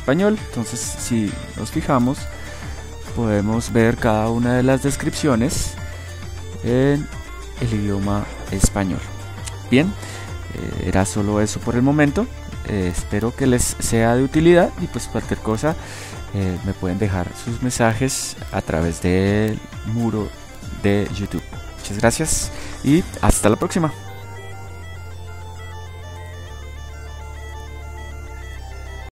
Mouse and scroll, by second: 12.9-15.6 middle drag, 26.2 click, 26.5-29.1 drag.